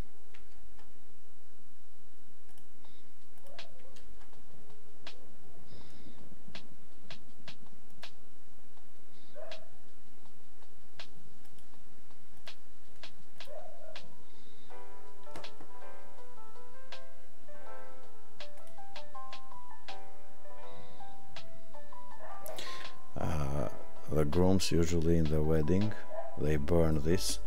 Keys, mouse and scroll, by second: 3.4 click, 11.4 click, 12.5 click, 13.4 click.